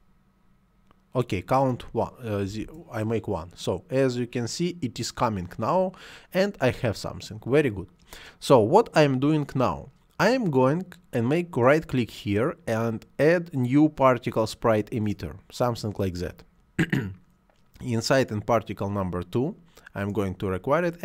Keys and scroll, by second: 2.4 1, 2.4 Return.